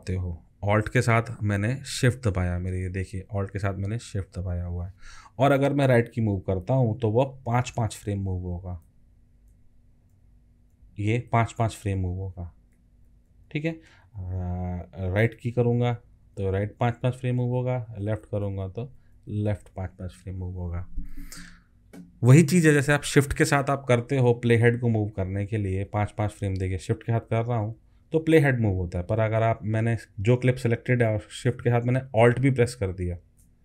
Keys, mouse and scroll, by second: 7.2 alt+shift+Left, 8.1 alt+shift+Left, 8.8 alt+shift+Left, 9.5 alt+shift+Left, 10.1 alt+shift+Left, 10.7 alt+shift+Left, 11.3 alt+shift+Left, 11.8 alt+shift+Left, 12.4 alt+shift+Left, 12.7 alt+shift+Left, 13.1 alt+shift+Left, 13.3 alt+shift+Left, 13.5 alt+shift+Left, 15.2 alt+shift+Right, 15.5 alt+shift+Right, 15.7 alt+shift+Right, 15.9 alt+shift+Right, 16.1 alt+shift+Right, 16.4 alt+shift+Right, 16.6 alt+shift+Right, 16.7 alt+shift+Right, 16.9 alt+shift+Right, 17.1 alt+shift+Right, 17.3 alt+shift+Right, 18.0 alt+shift+Left, 18.2 alt+shift+Left, 18.4 alt+shift+Left, 18.7 alt+shift+Left, 18.8 alt+shift+Left, 18.9 alt+shift+Left, 19.1 alt+shift+Left, 19.3 alt+shift+Left, 19.4 alt+shift+Left, 25.2 shift+Right, 25.9 shift+Right, 26.5 shift+Right, 27.2 shift+Right, 27.8 shift+Right, 28.1 shift+Right, 28.7 shift+Right, 29.0 shift+Right, 33.1 shift+Right.